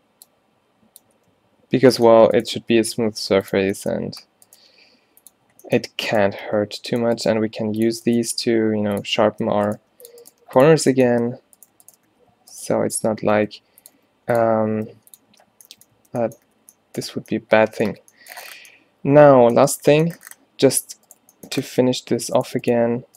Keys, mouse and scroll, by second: 1.3 q, 2.6 g, 4.7 g, 6.5 g, 7.4 g, 8.3 g, 9.4 Tab, 9.7 Tab, 9.8 g, 10.3 g, 10.7 Tab, 11.2 Tab, 12.2 s, 13.1 shift+Tab, 13.4 s, 14.0 r, 14.8 s, 15.4 Tab, 16.1 Tab, 16.5 a, 16.8 a.